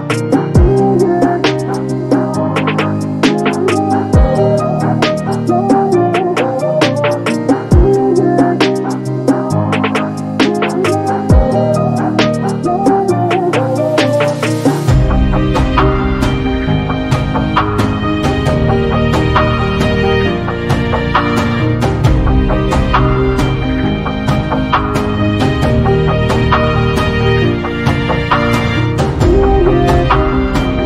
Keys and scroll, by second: 0.1 q, 0.7 space, 2.3 s, 6.8 m, 11.5 space, 15.8 space.